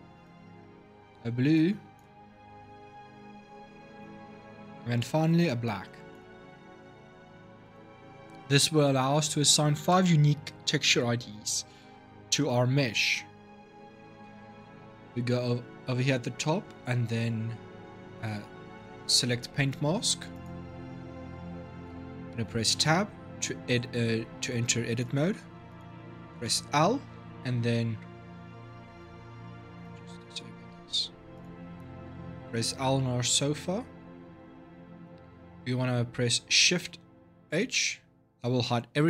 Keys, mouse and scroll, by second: 20.1 click, 22.5 Tab, 24.7 click, 25.5 click, 26.1 l, 28.7 click, 29.5 shift+click, 31.1 click, 32.5 l, 37.4 shift+h.